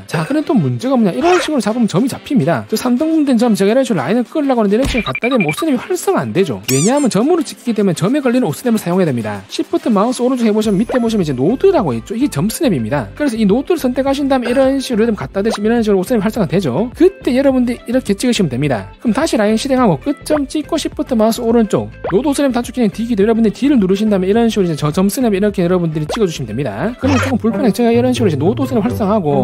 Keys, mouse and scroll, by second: 1.8 click, 2.2 click, 14.3 click, 18.1 click, 18.4 right click, 19.9 right click, 20.7 click, 21.6 shift+click, 24.5 d, 26.3 click, 26.5 right click, 28.2 shift+click, 29.3 d.